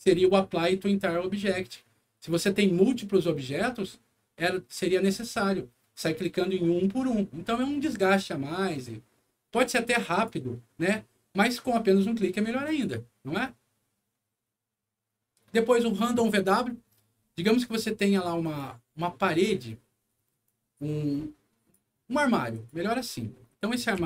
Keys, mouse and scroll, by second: 2.1 scroll down 1, 9.9 click, 12.6 click, 16.4 scroll up 1, 16.9 middle click, 17.3 scroll down 1, 18.3 click, 19.2 click, 19.7 middle click, 20.4-21.6 drag, 22.5 click, 23.0 scroll up 2, 23.3 middle click, 23.9 m.